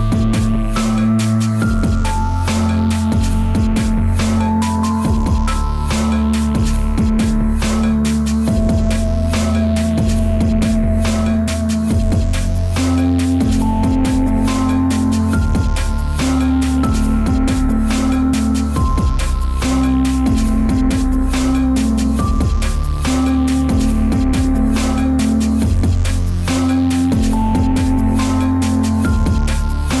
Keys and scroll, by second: 0.3 ctrl+z, 2.2 ctrl+z, 3.0 ctrl+z, 12.9 space, 13.9 space, 14.9 space, 15.3 space, 26.8 ctrl+z, 27.5 ctrl+z, 28.3 ctrl+z, 28.6 ctrl+z, 29.2 space, 29.7 ctrl+z.